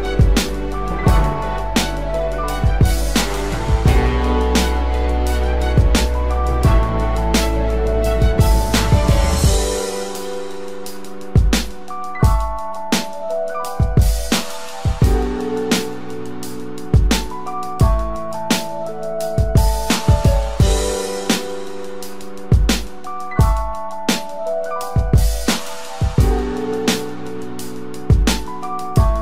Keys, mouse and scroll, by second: 0.0 ctrl+click, 1.1 ctrl+click, 2.1 ctrl+click, 2.7 ctrl+click, 4.1 ctrl+click, 4.8 ctrl+click, 6.0 ctrl+click, 8.1 double click, 8.2 ctrl+click, 8.7 ctrl+click, 9.1 ctrl+click, 10.1 ctrl+click, 10.7 ctrl+click, 12.4 ctrl+click, 13.1 ctrl+click, 13.7 ctrl+click, 15.8 ctrl+click, 16.5 ctrl+click, 17.9 double click, 18.0 ctrl+click, 19.3 ctrl+click, 20.8 ctrl+click, 21.7 ctrl+click, 23.6 ctrl+click, 24.9 ctrl+click, 25.9 double click, 25.9 ctrl+click, 26.9 ctrl+click, 28.3 ctrl+click, 29.0 space.